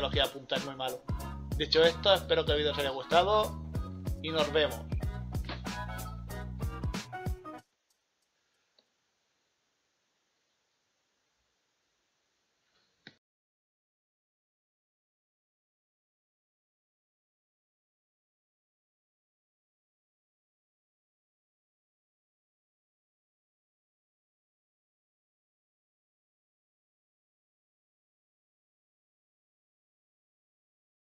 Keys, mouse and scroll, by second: 1.0-1.4 scroll down 2, 2.5 scroll up 1, 2.8 scroll down 1, 3.0 scroll up 1, 3.6 scroll down 1.